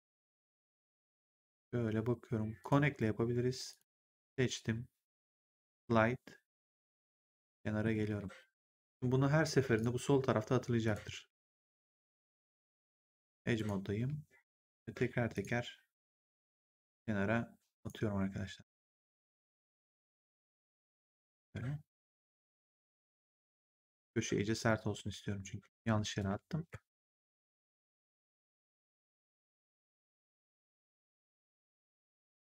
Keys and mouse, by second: 2.5 click, 3.6 click, 5.1 click, 5.8 middle click, 8.0 w, 9.7 click, 10.7 click, 11.2 w, 11.7 right click, 12.5 click, 13.9 w, 15.3 click, 16.5 w, 17.7 click, 18.9 w, 20.1 click, 22.5 w, 23.8 click, 24.9 w, 26.1 ctrl+z, 28.3 click, 29.6 w, 31.7 w.